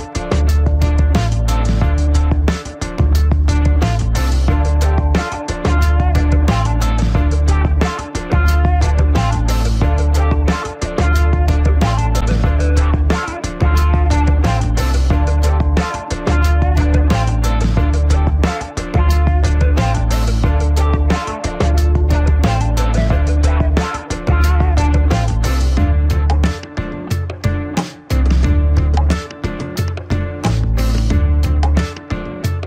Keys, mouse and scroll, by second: 6.4 click, 6.5 click, 9.3 click, 9.6 ctrl+-, 11.4 h, 11.9 click, 12.0 space, 12.6 ctrl+=, 12.8 space, 12.9 click, 12.9 space, 13.8-15.5 alt+drag, 15.6 alt+click, 15.7 ctrl+=, 15.9 space, 15.9 click, 16.1 space, 16.2-18.6 alt+drag, 19.2 alt+click, 19.6 scroll up 1, 20.5-23.1 alt+drag, 23.1 typing, 23.7 alt+click, 24.6 scroll up 1, 25.1 scroll down 1, 25.3 alt+click, 25.7 scroll up 1, 26.2 ctrl+=, 26.4 scroll up 1, 27.0 alt+click, 28.0 ctrl+-, 28.5 ctrl+=, 28.8 space, 28.9 click, 28.9 space, 29.3 alt+click, 30.2 scroll up 1, 30.5-31.6 alt+drag, 31.6-32.0 scroll up 1, 32.1-32.6 alt+drag.